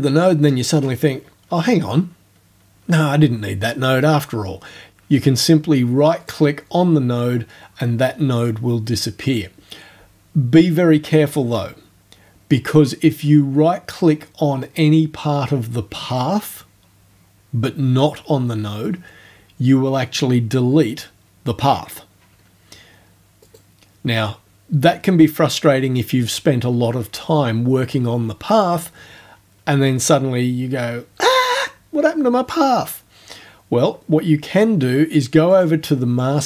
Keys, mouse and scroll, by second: 6.3 right click, 23.5 right click, 35.5 click.